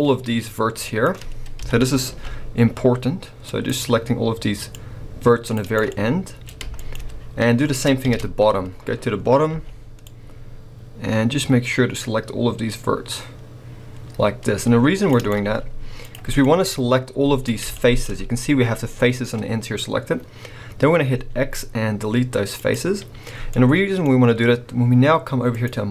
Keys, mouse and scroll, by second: 0.3-1.6 middle drag, 1.6 KP_7, 2.1 c, 5.7 right click, 5.9 middle click, 6.6 scroll up 2, 6.7 shift+middle click, 8.0 ctrl+KP_7, 8.7-9.5 scroll up 1, 9.5 c, 15.2 right click, 15.5 z, 16.4-17.5 middle drag, 17.5-18.2 scroll up 4, 17.7 shift+middle click, 19.0-21.1 scroll up 3, 19.3-21.1 middle drag, 21.1 x, 23.1-25.5 middle drag, 23.1-23.5 scroll down 2, 25.5-25.9 drag.